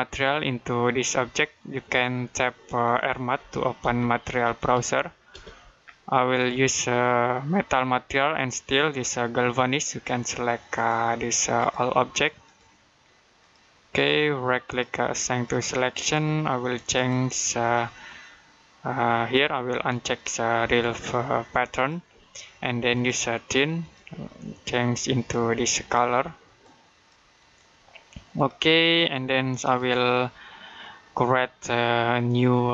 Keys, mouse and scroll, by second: 3.0-5.2 typing, 10.6 click, 14.5 right click, 15.3 click, 21.6 click, 29.6 right click.